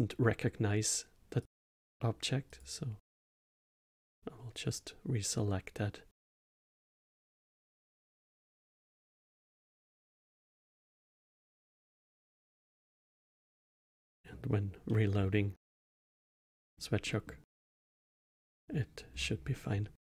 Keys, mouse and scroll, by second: 2.5 click, 3.9-6.5 drag, 7.0 middle click, 7.3-7.7 scroll down 8, 7.9 middle click, 8.7-9.6 scroll up 3, 9.6-10.7 middle drag, 10.7-13.1 drag, 13.1-16.3 middle drag, 16.5 middle click, 17.0-17.4 middle drag, 17.8 middle click, 18.5-19.1 middle drag, 19.1-19.5 scroll up 1, 19.5-20.1 middle drag.